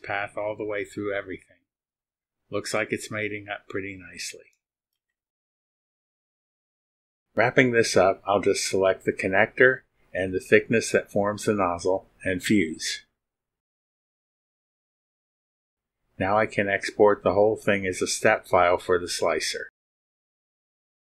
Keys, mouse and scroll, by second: 0.5 click, 1.1-2.6 drag, 4.0 scroll up 1, 9.9 ctrl+click, 12.3 click, 15.2 click, 16.4 click, 17.2 click, 20.9 click.